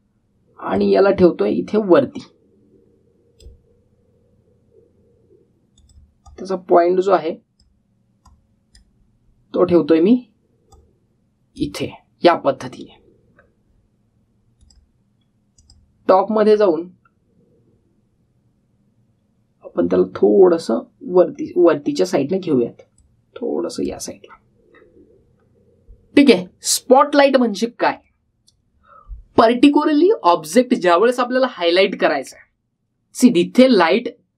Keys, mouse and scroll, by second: 0.3 scroll up 1, 1.5-4.3 drag, 15.4 click, 17.3-18.0 scroll down 1, 18.0-19.8 scroll up 1, 20.8 scroll down 1, 22.1-23.8 scroll up 1, 23.8-24.8 drag, 28.8 click, 30.9-31.6 typing.